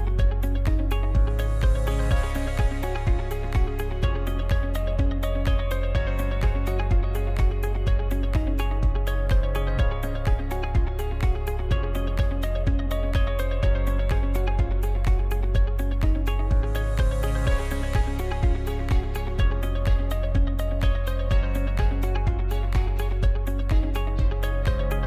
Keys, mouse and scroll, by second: 0.9 shift+right click, 1.7 ctrl+z, 2.1-4.9 middle drag, 4.9-5.5 scroll down 1, 5.5-8.5 middle drag, 8.6-9.4 middle drag, 9.4-10.3 scroll up 1, 10.3 shift+right click, 11.7 f, 12.3 right click, 12.7 right click, 13.9 shift+right click, 14.5 shift+right click, 15.1 shift+right click, 16.1 f, 17.5 right click, 18.7 shift+right click, 19.5 ctrl+z, 19.8-20.9 shift+middle drag, 20.9 shift+right click, 21.8 f, 22.4-24.5 shift+middle drag, 24.5 ctrl+r.